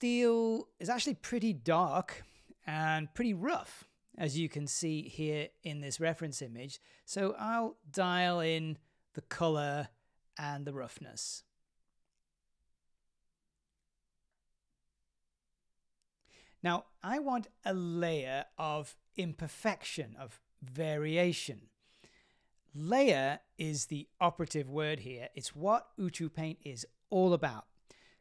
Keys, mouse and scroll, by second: 1.8 scroll up 1, 1.8-3.1 middle drag, 3.3 scroll up 1, 5.1-9.8 drag, 11.1 click.